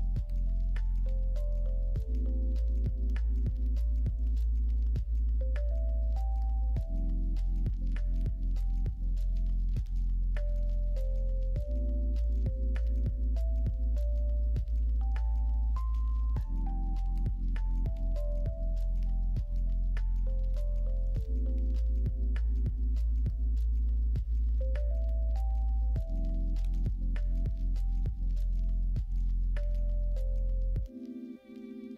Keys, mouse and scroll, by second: 0.3 click, 0.9 shift+click, 2.1 m, 3.2 click, 3.6 shift+click, 4.3 m, 5.7 click, 6.1 shift+click, 6.9 m, 9.9 shift+click, 10.7 m, 11.6 shift+middle click, 12.5 click, 12.7 middle click, 13.9 shift+middle click, 14.5 middle click, 18.4 middle click, 18.8 shift+middle click, 19.5 middle click, 20.4 shift+middle click, 21.9 shift+click, 23.6 shift+click, 26.2 m, 28.5 click, 28.9 shift+click, 29.7 shift+click, 30.5 m.